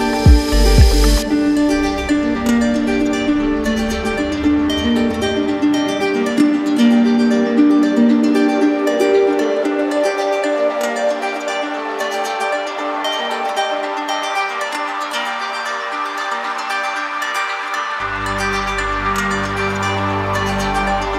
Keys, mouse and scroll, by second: 0.9 right click, 2.8 right click, 3.1 d, 4.2 right click, 5.1 click, 9.0 click, 10.0 click, 11.3 right click, 11.8 right click, 14.0 right click, 14.4 shift+right click, 16.0 shift+right click, 16.8 right click, 19.6 click, 20.3 right click.